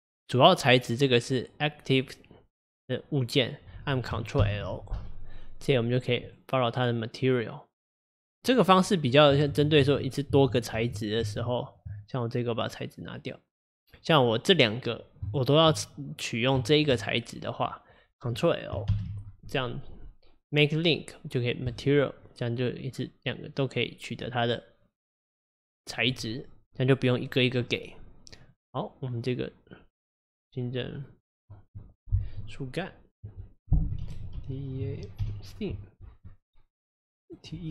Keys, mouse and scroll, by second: 4.4 ctrl+l, 9.5 ctrl+z, 9.9 ctrl+z, 10.4 ctrl+z, 10.8 ctrl+z, 11.3 ctrl+z, 13.2-14.9 drag, 15.3 shift+click, 16.7 shift+click, 18.9 ctrl+l, 28.4 click, 30.1-34.0 drag.